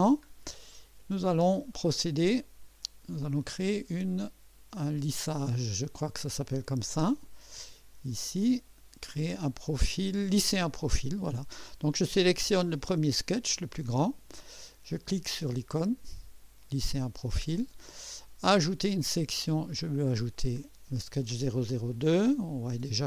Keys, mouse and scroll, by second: 0.0-0.4 scroll down 2, 0.5-1.4 drag, 1.7 right click, 2.8 right click, 4.2-5.2 drag, 12.8 click, 16.6 click, 18.8 click, 20.3 click, 21.9-23.0 drag.